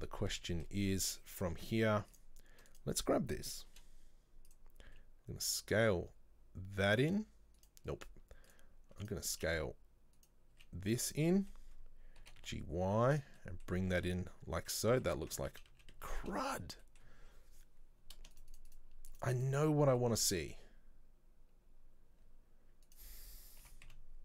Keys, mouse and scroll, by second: 0.6-2.2 shift+middle drag, 2.2 click, 2.7 right click, 3.7 e, 8.5 click, 9.1 right click, 9.4 s, 11.4 middle click, 12.3 g, 13.4 middle click, 13.7-14.0 scroll down 1, 14.0 Tab, 14.1-15.1 middle drag, 15.1 Tab, 15.5 ctrl+z, 15.8 ctrl+z, 16.9-18.4 middle drag, 18.4 shift+right click, 18.6 shift+right click, 18.7 shift+right click, 19.2 shift+right click, 19.4 shift+right click, 20.0-22.9 middle drag, 22.9 right click, 23.7 g.